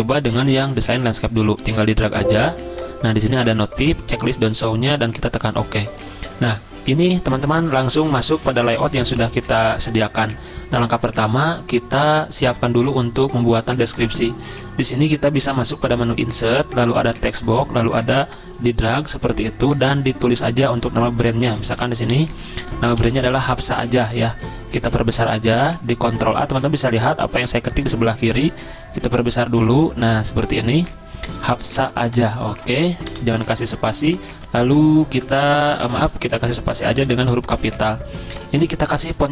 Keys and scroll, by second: 21.2-23.8 typing, 24.0 ctrl+a, 33.1 BackSpace, 36.0 ctrl+z, 37.1 a, 38.8 Return.